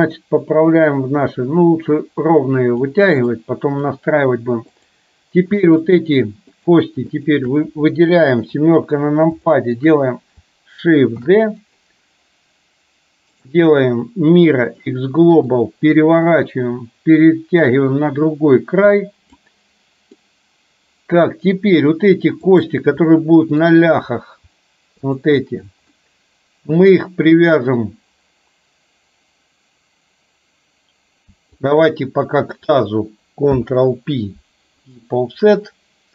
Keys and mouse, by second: 0.1-2.9 drag, 3.4 middle click, 4.9 click, 5.8 shift+click, 6.6 shift+click, 7.1 shift+click, 8.4 KP_7, 9.5 shift+middle click, 11.3 shift+d, 13.4-14.9 right drag, 15.8-19.5 drag, 20.1-21.9 middle drag, 23.1 middle click, 25.3 shift+click, 26.0-27.5 middle drag, 33.6 ctrl+p.